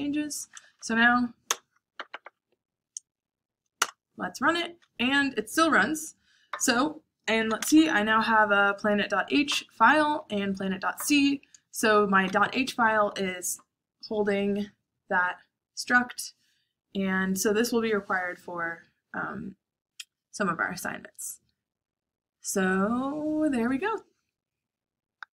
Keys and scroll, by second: 0.3 Up, 0.5 Up, 0.6 Up, 1.5 Return, 1.7 Up, 3.8 Return, 6.9-7.7 typing.